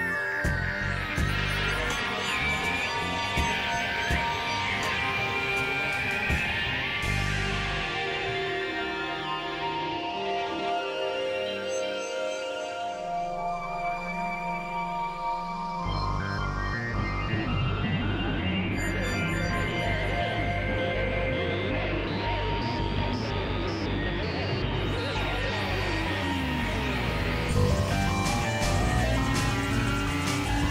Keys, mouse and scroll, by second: 1.0 x, 1.2-2.9 drag, 3.9 click, 4.2 space, 5.0 ctrl+z, 5.2 x, 5.7 click, 6.4 click, 9.0 click, 10.2 click, 12.8 middle click, 14.6 click, 15.3 KP_Divide, 16.6 right click, 17.3 middle click, 18.6 KP_3, 19.0 KP_1, 20.0 x, 20.8-23.4 drag, 24.5 ctrl+z, 24.6 ctrl+z, 25.0 x, 25.5 click, 26.5 click, 27.3 click, 30.2 click.